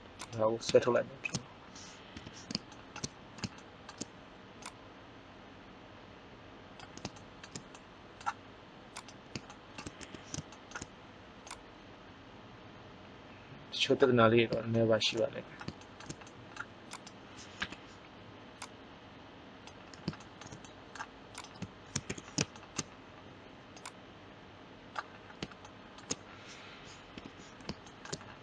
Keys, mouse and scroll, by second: 1.4 right click, 2.1 KP_1, 4.6 right click, 5.2 click, 8.9 right click, 9.9 KP_1, 11.4-12.7 drag, 17.0-18.0 right drag, 17.5 KP_1, 22.0 KP_1, 23.7-25.3 drag, 27.1 KP_3.